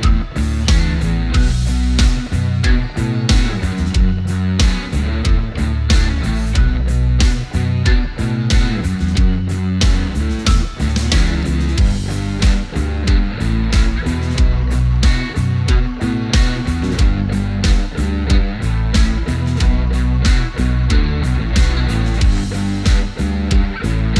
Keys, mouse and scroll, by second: 11.4 scroll up 1, 13.0 click, 16.2 click, 19.5 click.